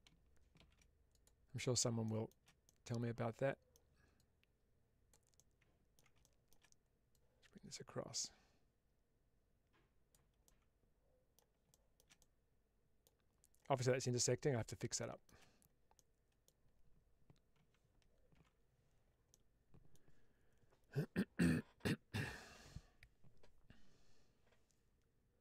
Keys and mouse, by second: 1.0 click, 1.9 shift+middle click, 2.5-3.7 middle drag, 4.1 click, 5.2-5.8 middle drag, 6.3 shift+middle click, 7.0-10.0 drag, 10.3-11.3 middle drag, 11.6-11.9 shift+middle drag, 12.1-12.9 middle drag, 15.0 shift+middle click, 15.8 middle click, 18.4 alt+h, 19.2-19.9 middle drag.